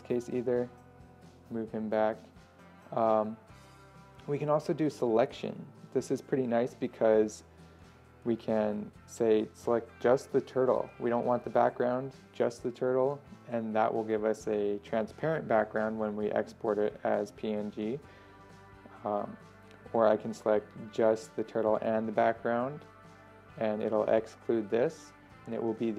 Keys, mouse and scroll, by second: 7.7 ctrl+scroll up 1, 8.5 middle click, 10.5-23.0 drag, 23.6 scroll down 1.